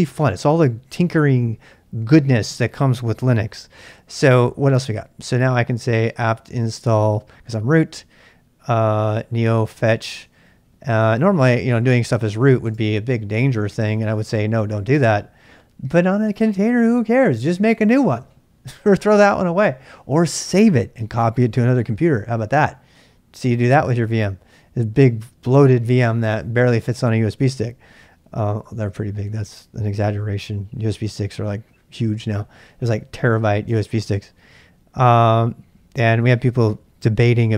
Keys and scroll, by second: 5.8-6.9 typing, 9.1-10.7 typing, 12.1-13.1 typing.